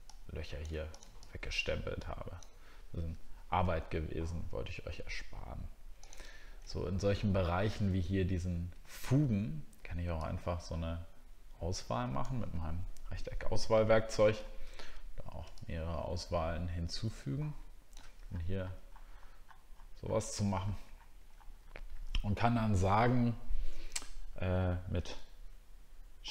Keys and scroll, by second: 15.4-15.9 ctrl+scroll down 1.